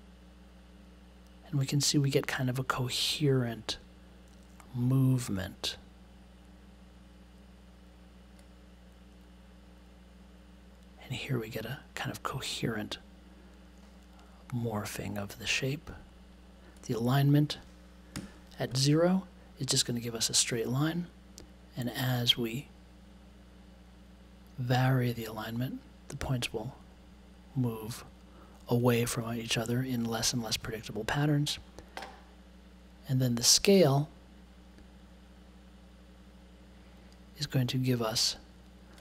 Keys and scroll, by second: 18.1 0.